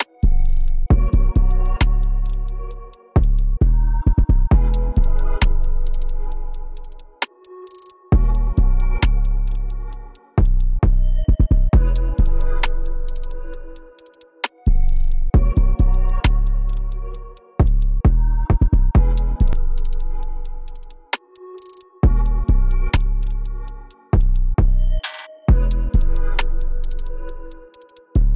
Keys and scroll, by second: 19.5 t, 22.9 shift+Down, 26.5 shift+Down, 26.7 shift+Down.